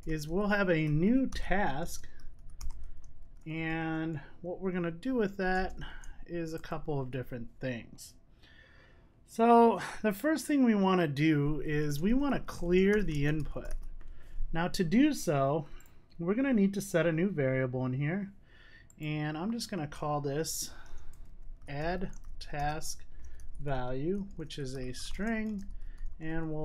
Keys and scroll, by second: 20.8 Tab.